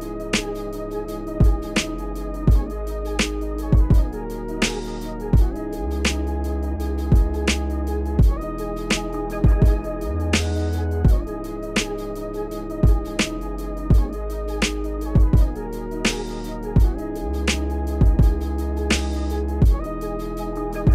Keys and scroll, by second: 0.0-1.4 typing, 1.8 Tab, 3.1-3.8 typing, 19.4 typing.